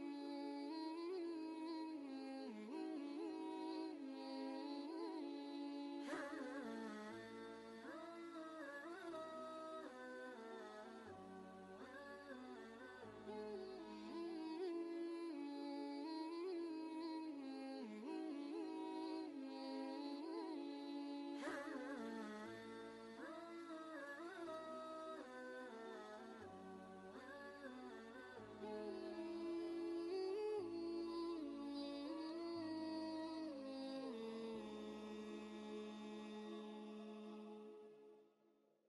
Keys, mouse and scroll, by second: 0.5 v, 1.3 ctrl+space, 1.4-4.7 ctrl+drag, 4.7-9.4 alt+drag, 11.7-14.2 typing, 16.3 typing, 18.9 space, 23.8 space, 26.5 ctrl+Return, 29.2-32.8 shift+drag, 36.2-38.8 drag.